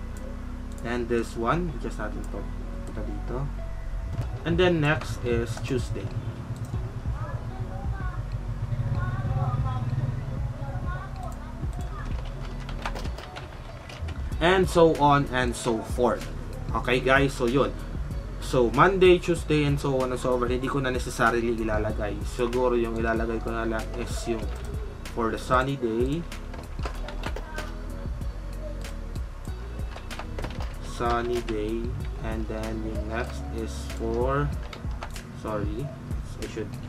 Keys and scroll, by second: 12.1-14.3 typing, 12.5 ctrl+a, 26.9 ctrl+shift+a, 30.1-31.8 typing, 34.6 ctrl+z, 36.7 ctrl+y.